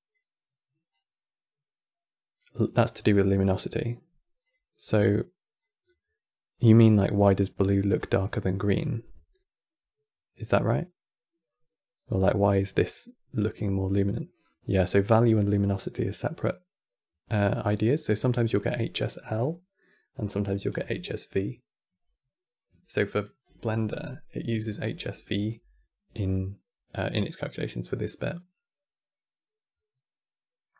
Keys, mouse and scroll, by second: 0.6-3.6 drag, 4.1 click, 7.8 click, 14.1-17.1 drag.